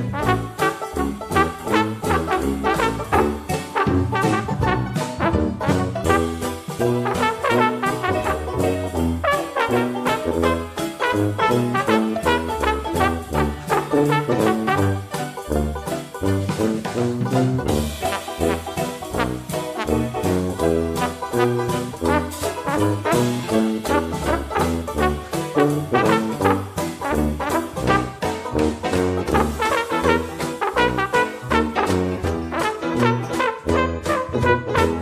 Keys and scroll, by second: 1.3 ctrl+d, 6.3 ctrl+d, 17.9 ctrl+d.